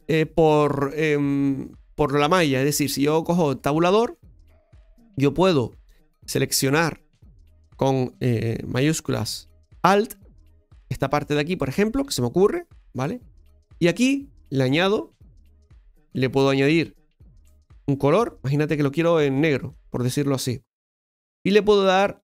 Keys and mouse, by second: 3.6 Tab, 6.6-8.1 right drag, 10.1 alt+shift+right click, 15.2-16.8 drag, 18.1 click.